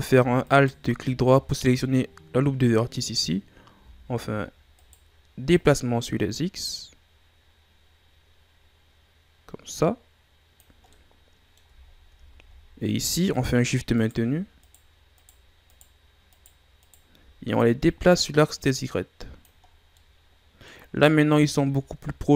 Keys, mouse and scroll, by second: 0.4 alt+right click, 3.7 s, 5.5-8.5 drag, 10.9 middle click, 11.8-12.5 shift+scroll down 4, 12.5-13.3 ctrl+scroll down 3, 13.3 right click, 13.9 shift+right click, 14.6 shift+right click, 15.1 shift+right click, 15.7 shift+right click, 16.3 shift+right click, 16.8 shift+right click, 17.8-19.6 drag, 19.6-20.0 scroll down 2, 20.0 middle click, 20.9-21.6 scroll up 4, 21.6-22.3 shift+scroll up 2.